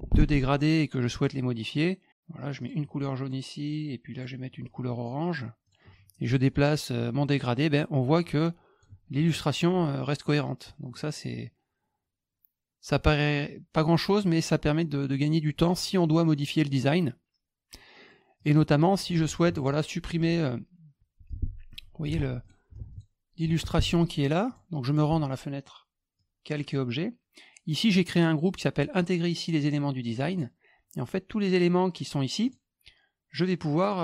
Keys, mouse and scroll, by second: 1.1 click, 2.6 click, 4.1 click, 5.6 click, 7.0-8.8 drag, 10.9-15.0 drag, 18.4 click, 19.4 F2, 19.7 click, 20.2 F1, 21.3-22.0 drag, 22.0 ctrl+z, 22.4 click, 22.7 F2, 22.9 click, 23.4 F1, 24.5 click, 24.9 click, 26.1 click, 27.8 click, 30.3 click, 32.4 click, 33.8 click.